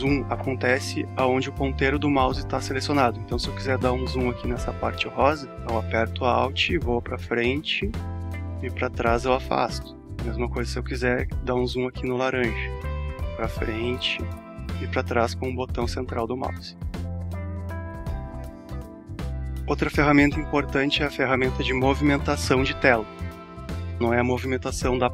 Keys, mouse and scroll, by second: 5.5-5.8 alt+scroll up 1, 7.4 alt+scroll down 1, 11.8-12.2 alt+scroll up 1, 16.8 alt+scroll down 1, 18.6-19.2 alt+scroll up 1, 19.9-21.7 alt+scroll up 1.